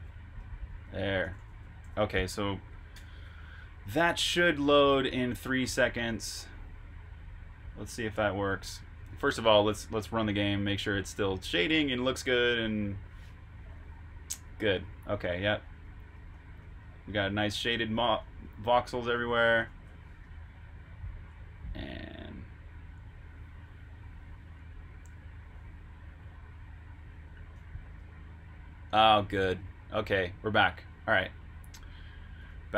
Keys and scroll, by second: 0.9-4.0 typing, 8.1 super+Tab, 9.1 shift+super+Tab, 9.5 super+r, 9.9-10.8 typing, 14.7-18.3 typing, 19.5 super+q, 20.2 super+Tab, 27.9 super+q, 32.4 super+Tab.